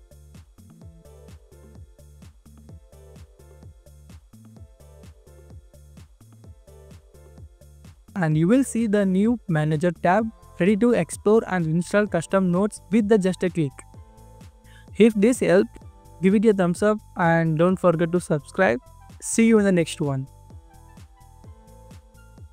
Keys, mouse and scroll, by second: 9.1 scroll down 1, 9.2 scroll up 1, 9.5 scroll down 1, 16.2 scroll down 1, 16.4 scroll up 1, 18.3 scroll down 1, 22.1 double click.